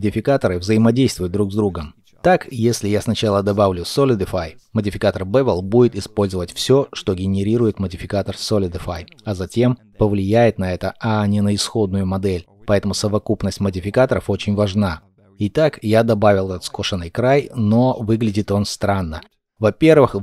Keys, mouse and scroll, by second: 16.4 ctrl+middle click, 19.3 ctrl+middle click.